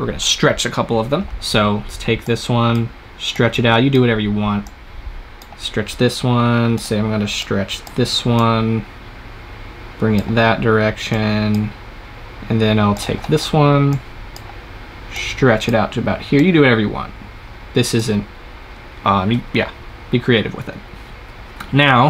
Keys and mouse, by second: 2.1-10.3 drag, 11.0-21.0 drag.